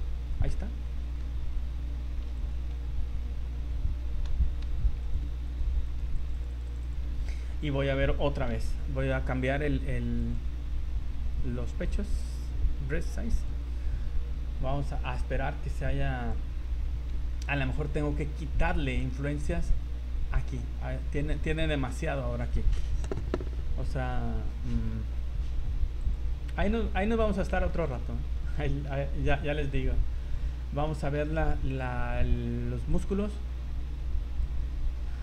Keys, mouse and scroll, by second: 0.0 middle click, 0.9 middle click, 2.3 v, 2.4 right click, 3.4 scroll up 2, 4.2 c, 4.6 v, 5.0 right click, 5.5 shift+right click, 5.9 right click, 6.1-6.5 click, 6.3 click, 6.8 click, 7.1 scroll down 4, 7.3 z, 7.7 middle click, 8.1 scroll up 1, 8.6 v, 9.2-9.5 scroll up 5, 10.2 click, 13.5 click, 17.4 shift+middle click, 17.7 middle click, 18.3 scroll up 3, 19.0 middle click, 20.8 middle click, 21.9 middle click, 22.4 scroll up 2, 24.1 scroll down 3, 24.7 scroll up 1, 26.0 click, 27.1 z, 27.7 shift+middle click, 28.0-28.3 scroll up 4, 28.3 z, 28.5 middle click, 29.1 scroll down 1, 30.1-30.7 scroll down 6, 30.9 middle click, 32.9 click, 34.9 scroll down 3.